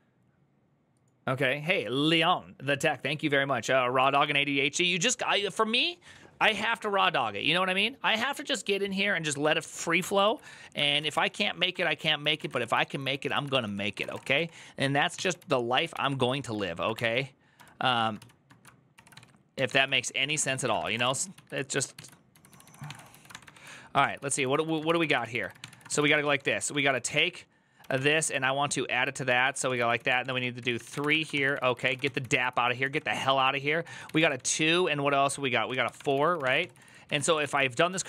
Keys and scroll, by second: 3.9 alt++, 10.1 alt+{, 10.5-38.0 typing, 11.5 ctrl+d, 11.6 ctrl+d, 23.8 ctrl+d, 29.1 ctrl+a, 37.7 ctrl+u.